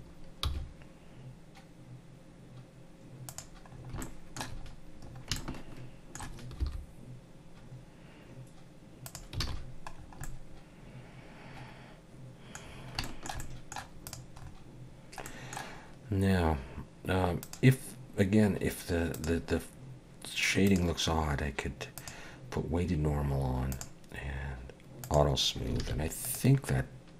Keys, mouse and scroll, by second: 0.5 g, 3.7 scroll up 3, 4.0 shift+middle click, 4.6-5.3 scroll up 5, 5.4 shift+middle click, 6.6 g, 9.4 alt+a, 9.5-10.3 scroll down 6, 10.2 middle click, 12.7 scroll down 3, 13.0 shift+middle click, 13.4 middle click, 14.1 click, 14.4-15.3 scroll up 4, 15.3 middle click, 17.4 click, 19.1 click, 20.7 click, 23.7 click, 25.0 click, 25.8 alt+a, 26.3 click.